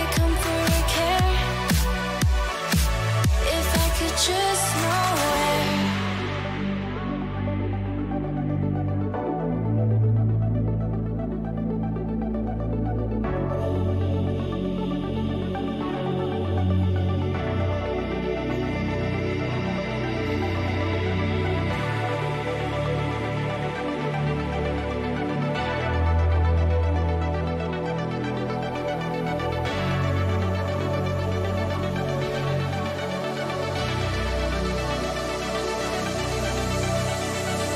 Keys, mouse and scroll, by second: 5.0-6.8 middle drag, 7.0 middle click, 15.3 a, 15.7-18.2 middle drag, 15.7 a, 21.0-24.6 middle drag, 24.5 KP_3, 25.2 a, 25.5 a, 31.5 shift+a, 35.9 Tab, 37.4 shift+a.